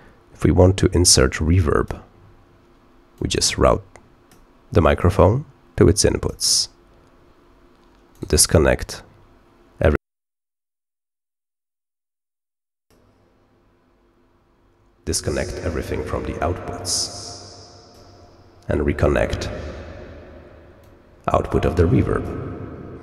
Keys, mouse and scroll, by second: 1.0 click, 3.1-4.3 drag, 4.9-6.2 drag, 8.1 right click, 9.7 click, 12.2 click, 16.7-17.9 drag, 20.7-22.2 drag.